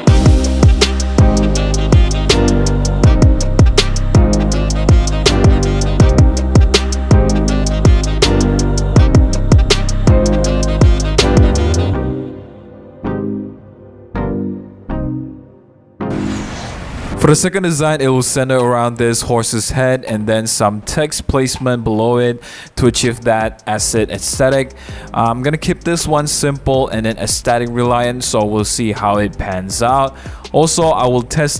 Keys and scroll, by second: 1.5 super+z, 2.0 super+v, 2.2 super+t, 2.3 Return, 2.3 super+t, 2.8-3.6 typing, 4.4 super+g, 5.1 v, 5.2 super+-, 5.6 super+t, 7.2 Return, 7.2 super+-, 7.4 super+-, 7.4 super+0, 12.5 super+x, 12.5 super+z, 13.7 Return, 13.9 super+-, 14.9-16.3 typing, 15.1 super+a, 15.1 super+c, 15.2 super+d, 15.2 super+v, 19.8 super+a, 20.1 super+c, 20.3 super+d, 24.0 super+d, 26.8-28.1 typing, 29.7 typing.